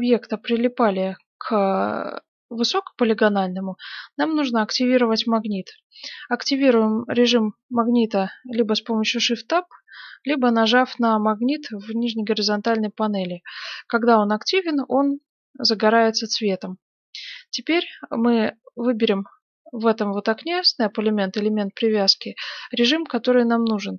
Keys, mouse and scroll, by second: 9.1 shift+Tab, 14.5-16.9 drag, 18.9-23.9 drag.